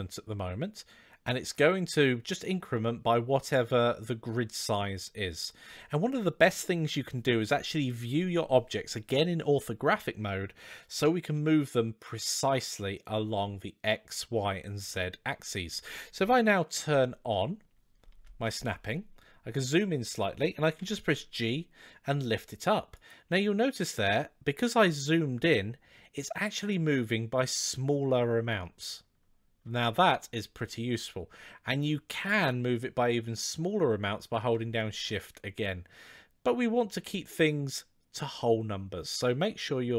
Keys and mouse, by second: 10.8 KP_3, 18.1 shift+Tab, 20.6 g, 23.3 g.